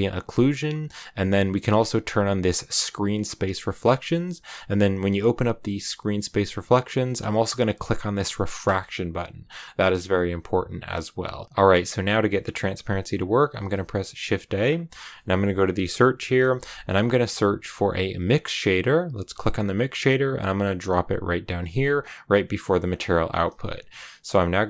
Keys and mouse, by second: 2.0 click, 2.3 click, 2.7 click, 7.2 click, 8.5 click, 13.5 shift+a, 22.8 click, 24.5 shift+a.